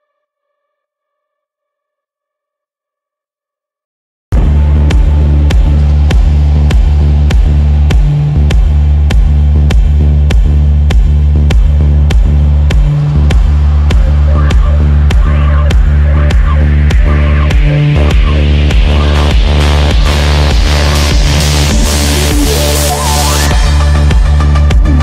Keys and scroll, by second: 2.1 f, 4.5 shift+F2, 10.2-11.0 typing, 16.4 shift+Page_Down, 22.0 shift+F2, 22.2 F3.